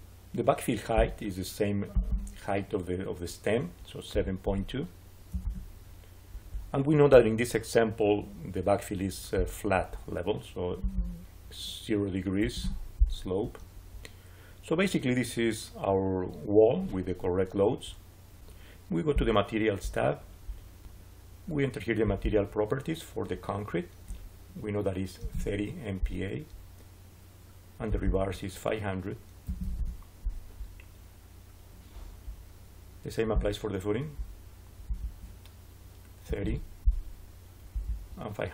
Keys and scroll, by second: 4.0 7, 4.3 ., 5.2 2, 5.3 Return, 12.3 0, 12.5 Return, 24.8-25.7 typing, 29.0-30.0 typing, 35.9-36.8 typing.